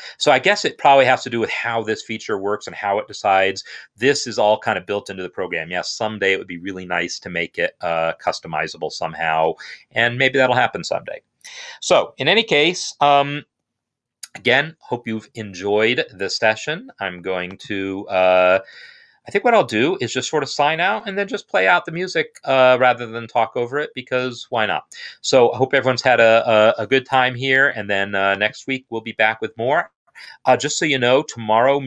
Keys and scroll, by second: 17.8 Down, 18.1 Down, 18.2 Down, 18.4 Down, 18.6 Down, 19.7 Down, 20.6 Down, 31.7 ctrl+Home.